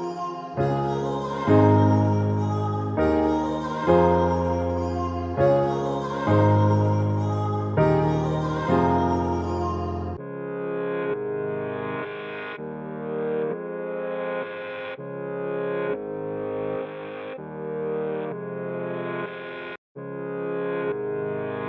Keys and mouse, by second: 0.6 click, 1.8-4.0 alt+shift+drag, 5.7 click, 7.0-8.6 drag, 9.8-11.1 drag, 11.1-13.1 alt+drag, 13.7 Left, 15.6 click, 16.9 ctrl+c, 18.3-20.2 alt+shift+drag, 20.2 ctrl+z, 21.1 alt+shift+click.